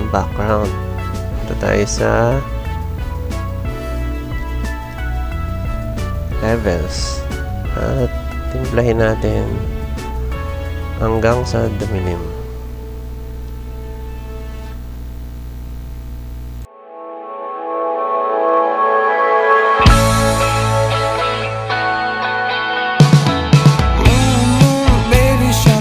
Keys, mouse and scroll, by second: 1.2 click, 3.2 click, 4.3 click, 6.5 click, 7.3 click, 8.8-10.2 drag, 11.3-14.5 drag, 15.2-18.2 drag, 18.8-21.6 drag, 22.3-25.8 drag.